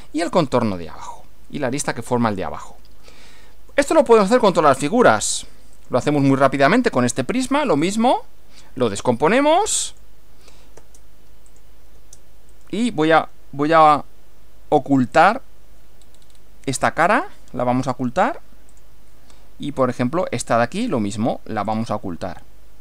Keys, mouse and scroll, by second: 0.6 scroll down 2, 3.0-3.9 shift+middle drag, 4.0 shift+scroll up 2, 4.2 shift+scroll down 3, 4.6-5.2 shift+middle drag, 5.8 click, 7.8 click, 8.8-9.2 scroll down 2, 9.9 click, 10.8 space, 11.5 click, 12.0 space, 12.5 right click, 15.2 click, 16.0-16.6 scroll down 1, 17.1 right click, 18.7 click, 19.8 click, 20.8 right click, 21.7 click.